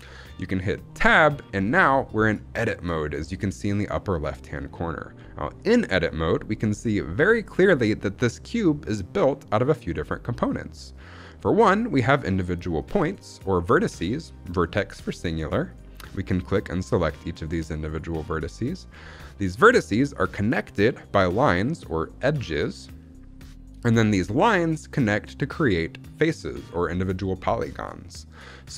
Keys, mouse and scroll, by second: 0.8 Tab, 7.3-11.2 middle drag, 12.7 click, 13.5 click, 15.6 click, 16.3 click, 16.8 click, 17.3 click, 17.8 click, 18.3 click, 19.1 middle click, 19.6-20.1 scroll up 1, 28.1 middle click.